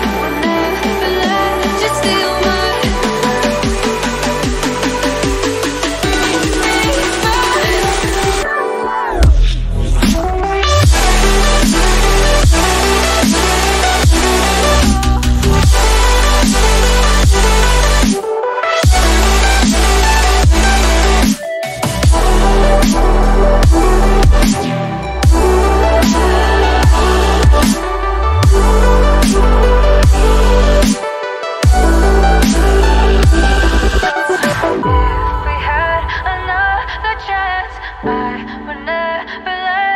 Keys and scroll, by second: 19.6 ctrl+d, 21.3 Left, 21.6 Left, 21.9 Left, 22.1 Left, 22.2 Left, 22.6 Left, 22.7 Left, 33.7 ctrl+d.